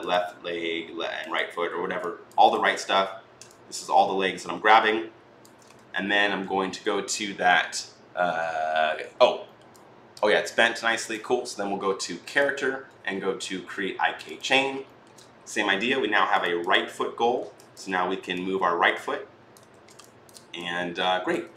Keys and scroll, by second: 5.5 ctrl+z, 19.5 ctrl+z, 21.3 ctrl+z.